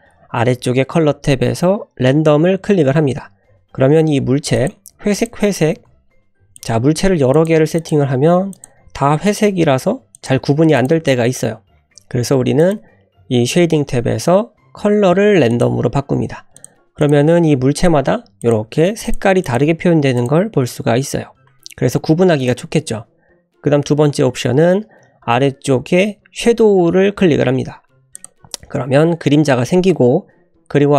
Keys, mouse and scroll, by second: 4.6 click, 5.1 click, 5.7 shift+a, 7.0-9.5 typing, 10.8 click, 12.6-16.2 drag, 16.6 click, 17.0 click, 17.4 shift+d, 19.4 click, 19.7 shift+d, 22.5-30.9 drag.